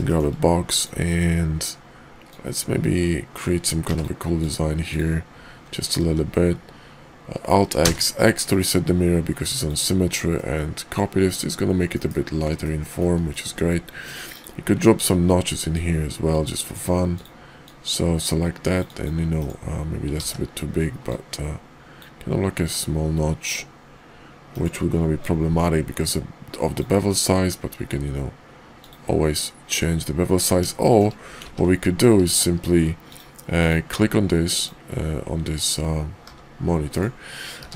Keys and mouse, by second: 0.1 shift+click, 0.6 click, 2.2-4.0 drag, 6.0 alt+x, 9.6 click, 10.3-11.0 middle drag, 11.9 KP_5, 12.6-13.0 middle drag, 13.3 shift+middle drag, 14.2 middle click, 15.6-16.7 drag, 17.1 click, 17.6-19.1 drag, 19.4 right click, 20.2 ctrl+z, 21.0-24.6 drag, 25.2-28.9 drag, 30.8 shift+drag, 31.4 ctrl+z, 33.5 click, 36.2 g, 37.4 q.